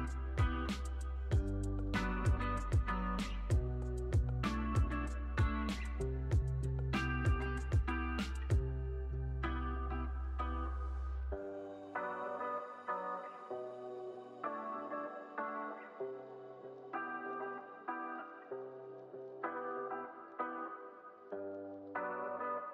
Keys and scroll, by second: 0.1 x, 1.8 super+c, 2.0 super+v, 2.8 z, 3.7 super+s, 14.3 space, 15.9 super+=, 21.8 space.